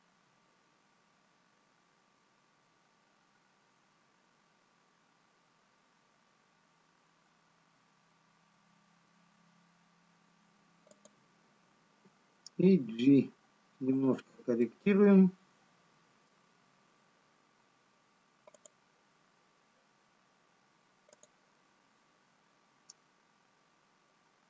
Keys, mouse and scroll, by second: 1.4 s, 13.3 g, 15.3 middle click, 23.4 click.